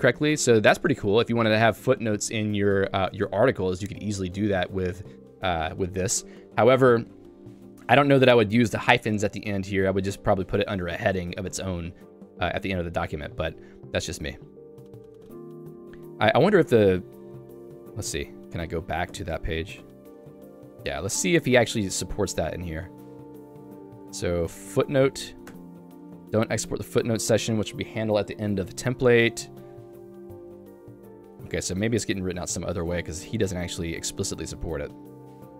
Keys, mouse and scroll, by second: 6.3-10.7 typing.